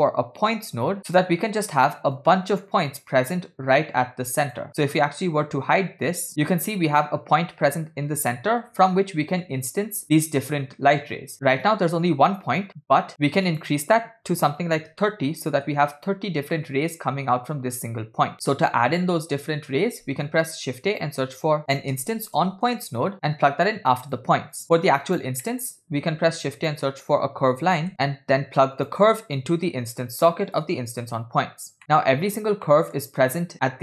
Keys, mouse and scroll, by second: 1.3 scroll up 2, 2.2-4.7 drag, 6.4 click, 6.4-6.8 scroll up 6, 6.4 m, 9.0 scroll down 3, 11.4 middle click, 13.5-15.6 drag, 20.4 shift+a, 24.8 click, 25.6 middle click, 26.0 shift+a, 29.4-30.9 drag, 31.9 middle click, 32.8 middle click.